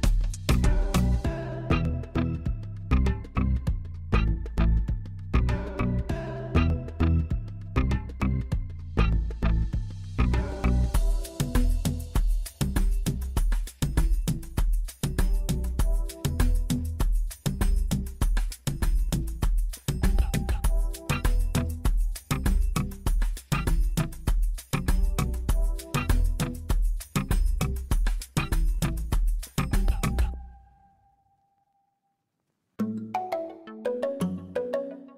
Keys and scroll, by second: 4.3 shift+z, 7.1 b, 7.8 shift+z, 8.8 g, 8.9 z, 11.5 shift+z, 13.8 b, 15.5 shift+z, 16.1 g, 16.2 z, 18.7 g, 18.9 z, 23.4 g, 23.6 z, 25.7 alt+a, 29.4 shift+z, 30.4 b.